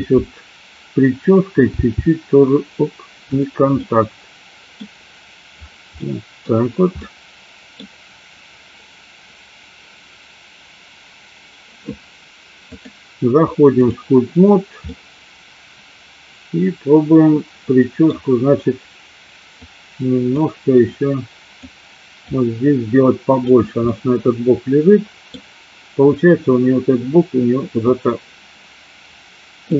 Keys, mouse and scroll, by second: 1.9 g, 3.4 click, 3.8-4.9 middle drag, 6.0 middle click, 7.0 middle click, 7.8 scroll down 1, 12.8-14.1 drag, 15.0-18.2 middle drag, 19.8 click, 20.9 click, 22.3-23.5 drag, 23.9-25.4 middle drag, 27.9-29.7 drag.